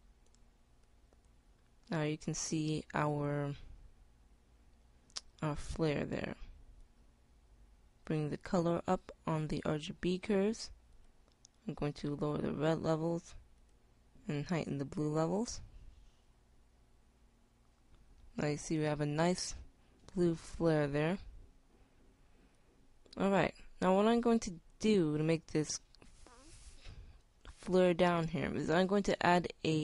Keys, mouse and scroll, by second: 8.5 click, 13.6-16.6 drag.